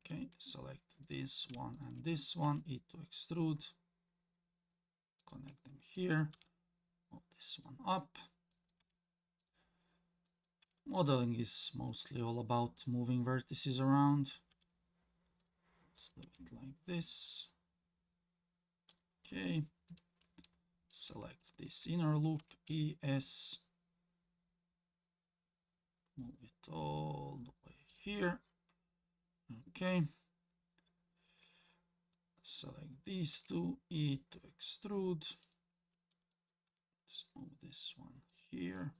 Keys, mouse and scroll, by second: 1.0 click, 1.7 shift+click, 2.4 e, 5.9 click, 6.3 g, 8.5 click, 8.8 g, 10.3 click, 10.6 g, 14.1 click, 14.5 g, 16.0 click, 16.2 g, 21.4 alt+click, 22.4 e, 32.1 click, 33.3 e, 36.3 click, 36.7 g, 38.8 click.